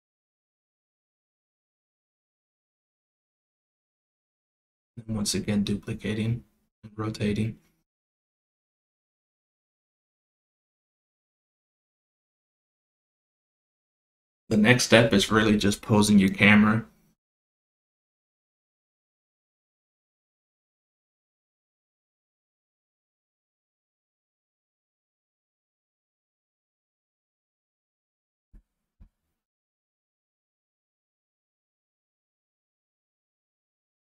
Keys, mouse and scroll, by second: 0.3 click, 1.5 click, 2.7 click, 3.5 shift+d, 5.6 r, 8.0 r, 10.2 click, 11.8 click, 14.0 click, 14.7 click, 15.8-19.1 drag, 19.4-20.6 drag, 21.2 click, 22.2 click, 22.9 click, 24.3 click, 25.8 click, 26.5 click, 27.2 click, 29.2 click, 30.4 click, 31.2 click, 33.8 click.